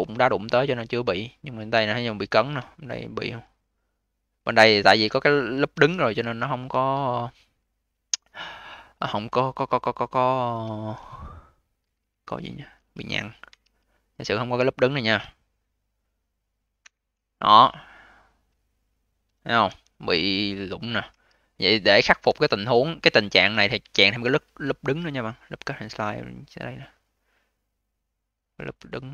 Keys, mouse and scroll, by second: 0.1-0.6 alt+middle drag, 0.6-2.3 alt+drag, 2.3 scroll down 2, 2.6-3.4 alt+drag, 3.4-4.5 scroll up 11, 4.5 q, 5.6 v, 6.1 q, 8.0-12.2 right drag, 12.2 1, 13.4 2, 14.1 click, 14.3 click, 16.8 ctrl+Delete, 19.6 v, 21.0 q, 21.8 q, 22.1 v, 23.7 a.